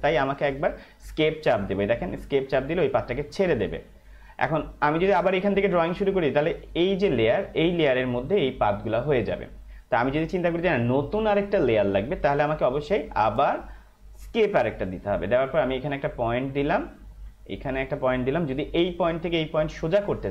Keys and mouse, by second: 3.4 Escape, 14.2 Escape, 16.5 click.